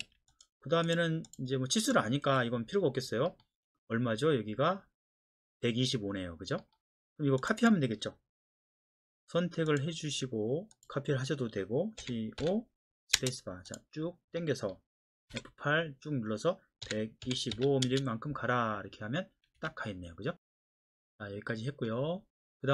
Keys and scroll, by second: 0.0 Escape, 2.2 Delete, 12.0-13.1 typing, 15.3 F8, 16.8 KP_1, 17.2 KP_2, 17.5 KP_5, 17.8 Return, 19.6 Escape.